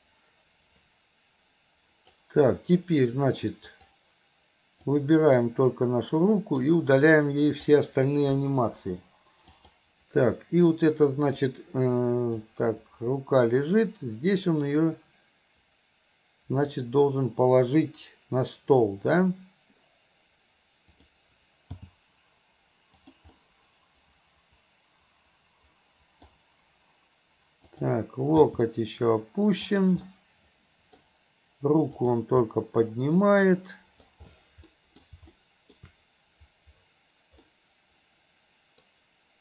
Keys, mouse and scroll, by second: 3.8 click, 5.0-5.5 drag, 6.6-7.7 drag, 8.7 Delete, 9.7 click, 10.7 click, 10.9 click, 12.5-17.1 drag, 21.0 click, 21.8 g, 23.4 scroll up 1, 23.5-26.4 middle drag, 27.7 click, 28.5 g, 30.1 scroll up 1, 30.2-31.1 middle drag, 31.1-31.5 scroll down 1, 32.0 click, 32.5-34.0 middle drag, 34.7 middle drag, 35.4-35.8 middle drag, 37.5-38.9 middle drag.